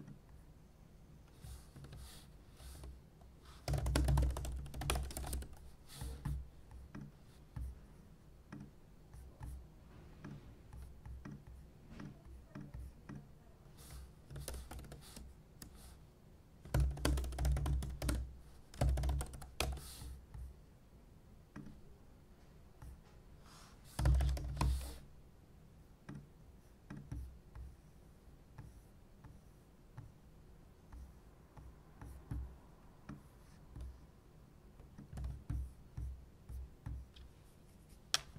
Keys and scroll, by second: 1.7 super+p, 2.7-5.8 typing, 14.3-14.8 typing, 14.4 Return, 16.5-19.8 typing, 19.9 ctrl+r, 23.7-25.1 typing.